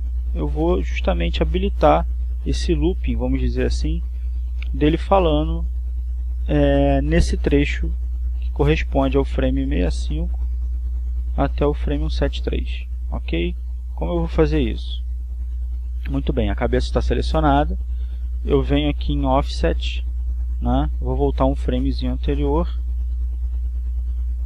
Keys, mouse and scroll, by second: 1.1-4.3 drag, 9.8-17.2 drag, 23.4-24.4 drag.